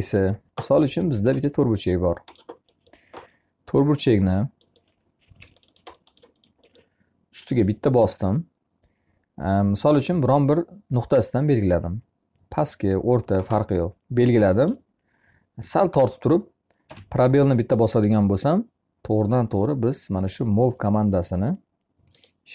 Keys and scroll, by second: 0.1 r, 4.7 m, 16.2 space.